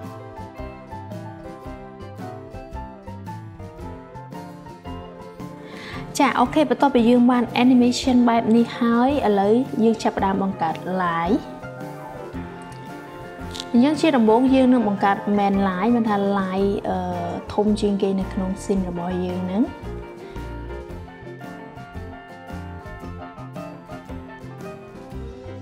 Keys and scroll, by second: 11.0 Return, 13.2-15.6 typing.